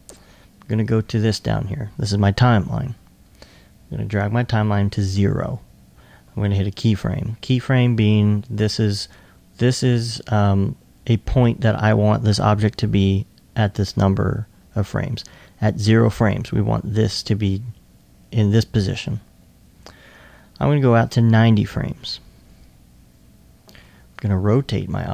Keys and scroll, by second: 23.8 r.